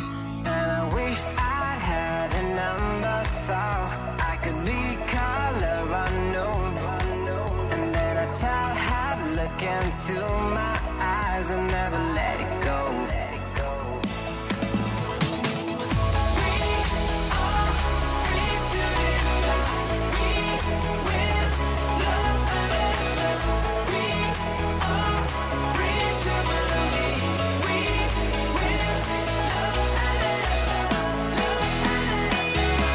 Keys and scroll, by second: 1.6 alt+Up, 2.9 alt+shift+Down, 4.2 alt+Up, 4.8 alt+Up, 15.6 alt+shift+Up, 15.8 alt+Down, 19.7 super+=, 24.4 super+g, 24.7 super+r, 25.5 super+-, 31.7 super+-.